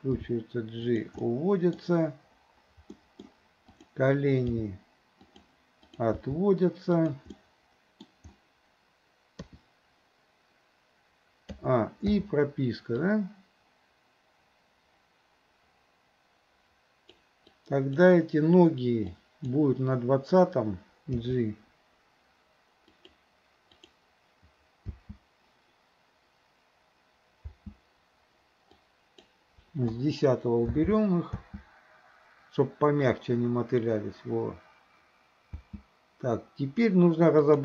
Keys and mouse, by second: 0.3 g, 1.3-1.8 middle drag, 3.0 middle click, 3.8 click, 4.6 g, 5.9 click, 6.2 g, 7.4-8.1 middle drag, 9.4 KP_3, 11.6 a, 12.2 i, 13.1-17.3 drag, 17.5-18.0 drag, 19.3 click, 21.3 g, 23.9 click, 25.0 space, 28.8-29.3 drag, 30.0 Delete, 30.8 space, 35.6 space, 37.5 click.